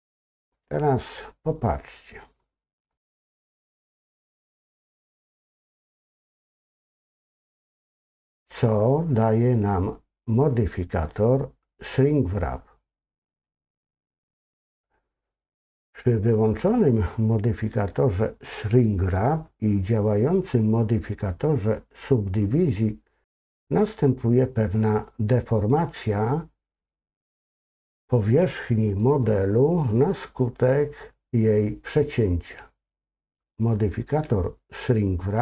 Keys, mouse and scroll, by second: 1.5 middle click, 2.5 scroll up 2, 3.1-7.0 middle drag, 13.5 click.